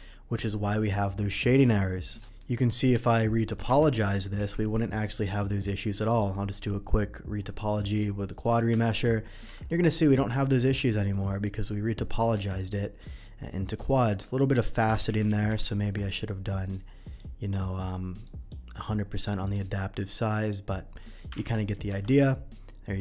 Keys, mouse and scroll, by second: 2.6 middle click, 3.0 Tab, 3.4 middle click, 4.4 n, 5.0 click, 6.0 click, 7.9-8.4 middle drag, 8.8 ctrl+1, 9.3 ctrl+2, 9.6 middle click, 10.5 Tab, 11.4 middle click, 12.7-13.8 middle drag, 14.8 ctrl+z, 15.2 ctrl+z, 15.3 ctrl+z, 16.7-17.1 drag, 18.2 click, 19.4 click, 21.4 ctrl+1, 21.7 ctrl+2, 22.1-23.0 middle drag.